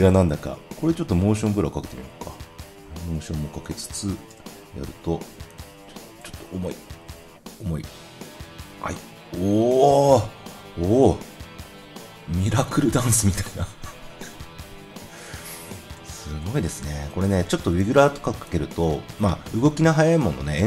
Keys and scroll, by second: 4.2 0.